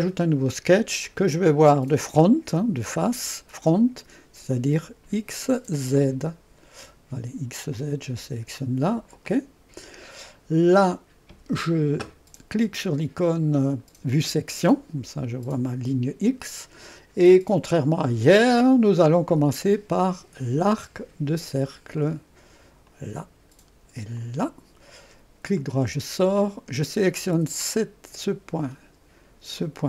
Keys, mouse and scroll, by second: 1.1 click, 2.3-3.6 drag, 7.8 click, 9.3 click, 10.5-10.9 scroll up 2, 10.9 right click, 14.1 click, 18.4 click, 22.0 click, 22.9 click, 24.2 click, 25.6 right click, 27.6 click, 29.6 click.